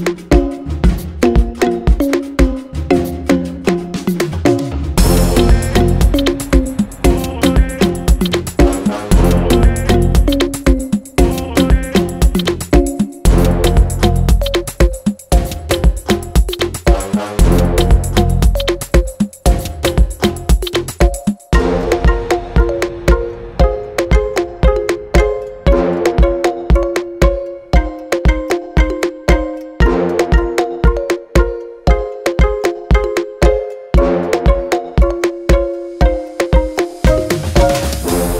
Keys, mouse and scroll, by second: 4.7 click, 5.1 alt+a, 8.3 ctrl+click, 8.9 shift+d, 10.6 click, 11.2 g, 13.0 ctrl+z, 13.3 shift+click, 13.6 g, 16.9 click, 17.3 g, 17.9 click, 18.7 r, 19.3 g, 19.8 click, 20.1 scroll down 1, 20.3-23.1 scroll up 1, 24.4 click, 26.1 shift+d, 26.3 right click, 26.5 s, 27.7 click, 28.3 click, 28.7 g, 30.1 click, 30.2 g, 31.2 click, 31.9 KP_3, 32.8-33.3 scroll up 1, 33.3 click, 35.2 e, 36.1 s.